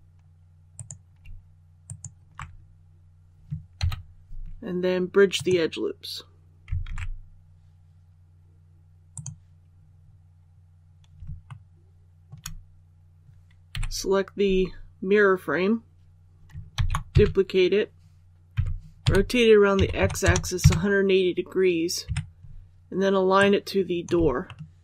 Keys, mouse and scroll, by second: 0.6 alt+right click, 1.8 alt+shift+right click, 3.7 ctrl+e, 5.2 click, 6.8 alt+a, 9.0 click, 9.6 scroll down 1, 11.4 shift+middle click, 13.2 alt+a, 13.6 typing, 16.6 shift+d, 18.5-19.7 typing, 23.3 click, 24.4 shift+middle click.